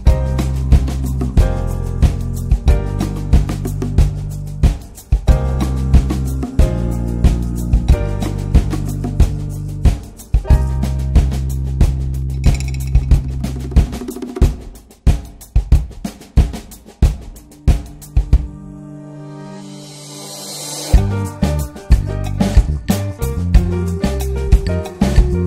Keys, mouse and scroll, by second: 2.1-3.5 middle drag, 3.5-7.0 drag, 8.4 click, 15.2-20.7 middle drag, 20.7-25.4 drag.